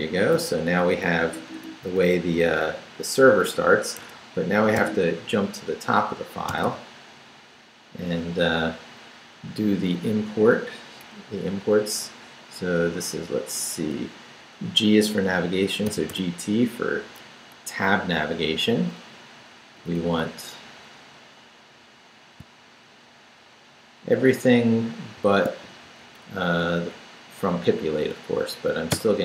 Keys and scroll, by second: 0.1 d, 0.8 Down, 1.8 Up, 2.4 Down, 4.0 Escape, 4.6 shift+Escape, 4.8 shift+g, 6.5 g, 8.0 Down, 15.7-16.6 typing, 18.1 Up, 19.0 Up, 19.8 Up, 25.2 shift+v, 25.6 shift+Down, 28.9 y.